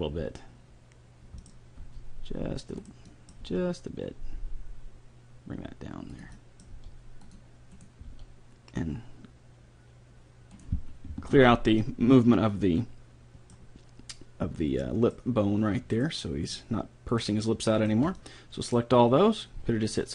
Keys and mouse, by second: 3.1-4.7 middle drag, 3.4 g, 6.3 middle click, 6.7 g, 7.8 right click, 8.1 g, 11.4 alt+g, 11.8-13.5 middle drag, 14.8 middle click, 16.0 right click, 16.6-19.5 right drag, 18.2-19.5 drag, 19.5-20.1 middle drag.